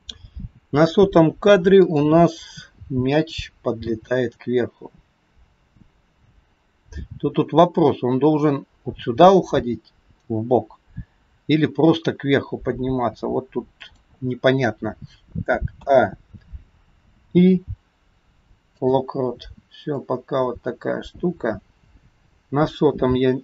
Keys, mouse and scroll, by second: 1.8 click, 3.9 g, 15.9 a, 17.4 i, 20.1 click.